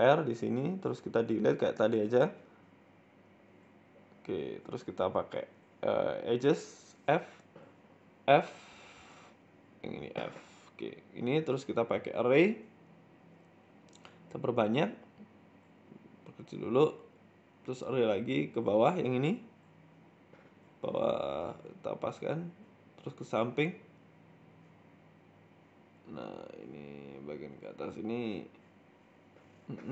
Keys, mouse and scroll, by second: 1.0 shift+middle click, 1.0 scroll down 4, 2.2 click, 2.5 click, 3.1 Delete, 4.0 middle click, 4.2-5.4 scroll up 3, 5.4 click, 5.9 right click, 6.2 shift+right click, 7.1 f, 7.5 right click, 7.9 right click, 8.2 shift+right click, 8.3 shift+right click, 9.2 f, 9.6 right click, 9.8 alt+shift+right click, 10.5 alt+shift+Right, 10.5 f, 10.6 scroll down 4, 10.9 Tab, 11.1 middle click, 13.5 click, 13.5 scroll down 1, 13.6-13.9 scroll down 1, 14.2-14.6 click, 14.3 click, 14.4 click, 14.8-15.4 scroll down 2, 15.4 s, 16.3 scroll up 5, 18.4-18.7 scroll down 8, 23.9-24.2 scroll up 2, 29.7-29.9 scroll up 8.